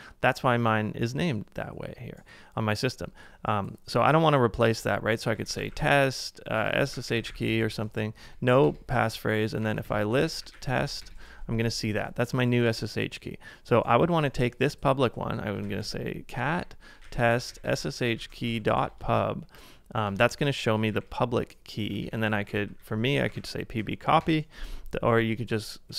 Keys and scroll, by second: 5.0-11.4 typing, 15.8-18.4 typing, 20.1 Return, 21.0 Up, 21.8-23.2 typing.